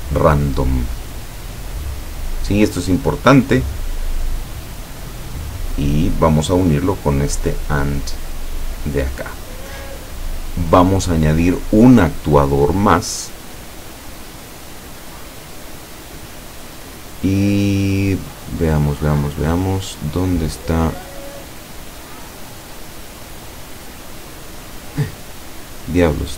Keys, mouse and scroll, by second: 6.4-8.0 drag, 8.5-9.5 middle drag, 9.9-10.7 middle drag, 15.2 click, 16.1 click.